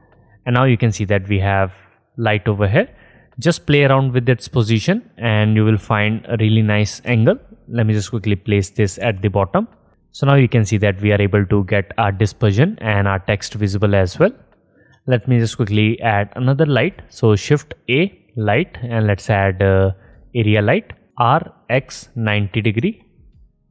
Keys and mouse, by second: 1.1 middle click, 1.5-6.1 drag, 2.3 middle click, 2.3 right click, 2.8 middle click, 2.8 right click, 5.7 r, 7.3 g, 7.8-9.3 drag, 9.3 r, 10.3 middle click, 15.5 shift+a, 21.3 r.